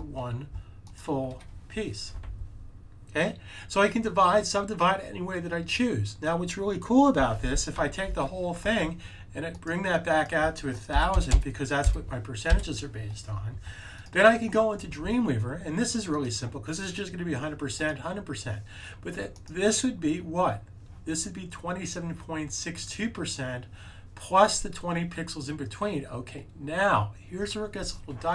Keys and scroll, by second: 8.0 super+a, 10.6-11.8 typing.